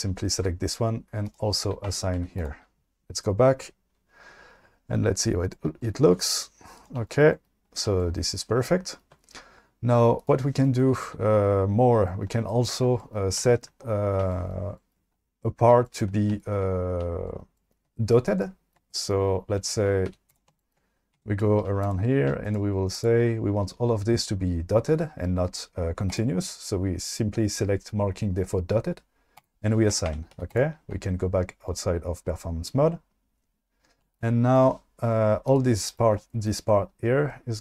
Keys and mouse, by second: 1.9 Tab, 2.2 q, 6.8 click, 10.2 click, 20.1 q, 21.2 Tab, 21.6 2, 21.9 click, 26.2 click, 29.5 click, 30.2 Tab, 30.3 q, 35.5 click.